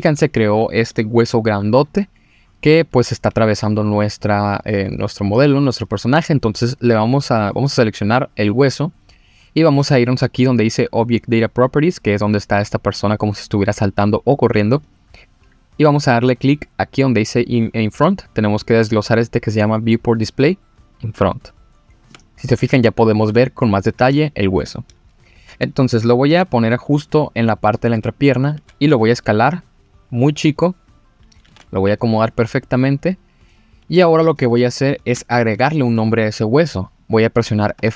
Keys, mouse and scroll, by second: 0.0-2.2 scroll up 1, 7.6 click, 14.8 click, 18.5 click, 20.1 click, 21.2 click, 22.1 scroll down 2, 22.9-24.1 scroll up 3, 24.1-24.6 shift+middle drag, 26.2 g, 26.3 z, 27.6 click, 28.2 click, 28.9 s, 30.9 click, 31.4 g, 31.9 z, 32.6 click, 32.9-33.9 scroll up 3, 33.9 scroll down 2, 34.4 scroll up 2, 35.2-35.6 shift+middle drag, 37.4 click, 37.8 F2.